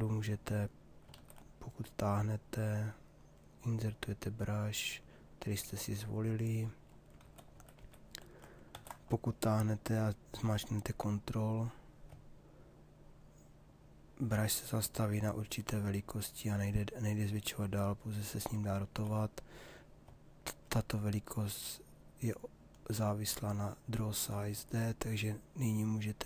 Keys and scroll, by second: 0.8 ctrl+z, 6.9 ctrl+z.